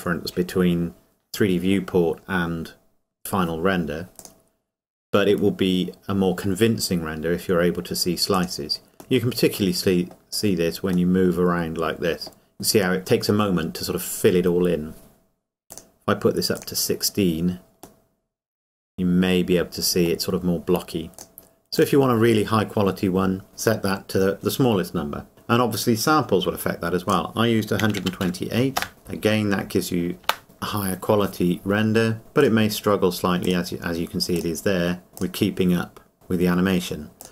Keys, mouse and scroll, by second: 4.2 click, 8.3 click, 9.2 middle click, 11.1 middle click, 15.7 click, 18.0 middle click, 21.2 click, 27.1 click, 30.2 KP_0, 32.4 click.